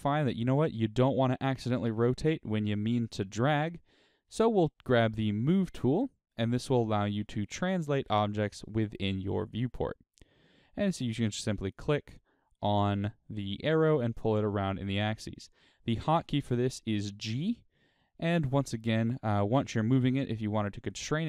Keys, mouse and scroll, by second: 4.8 click, 10.8-21.2 drag, 16.6 g.